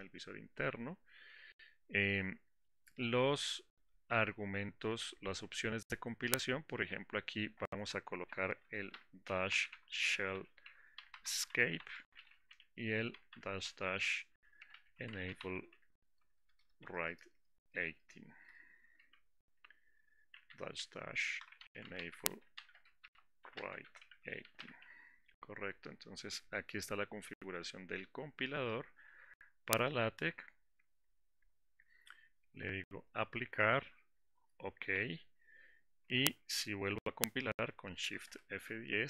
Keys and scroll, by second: 38.3 shift+F10.